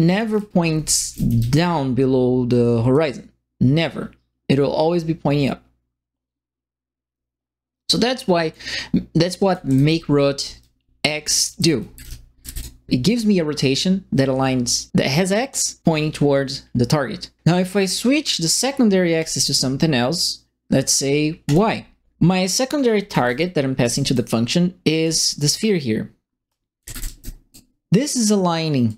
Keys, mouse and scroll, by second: 0.1-1.8 typing, 0.3-1.6 right drag, 2.9-8.5 drag, 9.2-12.9 typing, 9.2-12.6 right drag, 19.1 click, 21.4 click, 22.8-24.1 right drag, 22.8-23.8 typing, 25.0 right click, 26.4-27.5 right drag, 26.5-27.5 typing, 28.8 click.